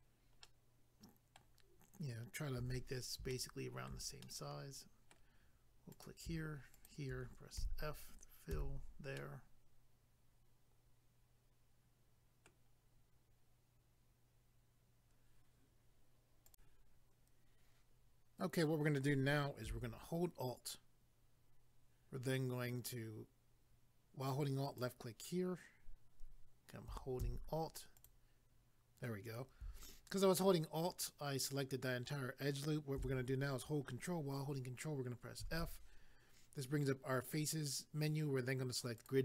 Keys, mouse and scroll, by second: 0.4 middle click, 2.6 a, 3.3 shift+middle click, 4.2 middle click, 5.9 click, 6.1 click, 6.7 shift+click, 6.9 shift+click, 7.6 f, 9.2 middle click, 16.5 click, 16.5 click, 24.7 alt+click, 24.8 alt+click, 28.0 alt+click, 39.0 click.